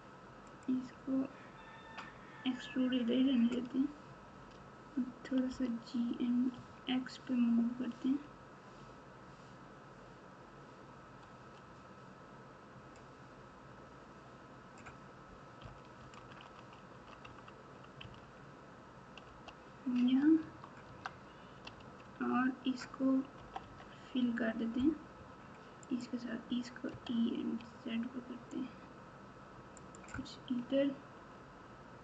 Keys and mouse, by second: 5.5 g, 20.4 Tab, 20.8 Tab, 21.7 alt+z, 23.3 KP_8, 23.6 KP_8, 25.8 click, 26.9 e, 30.6 KP_3.